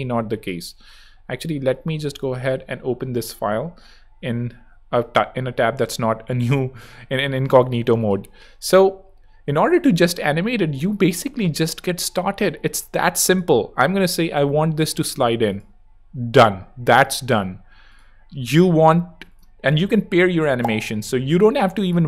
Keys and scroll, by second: 1.1 super+`, 1.6 super+t, 1.9 super+v, 2.1 super+Return.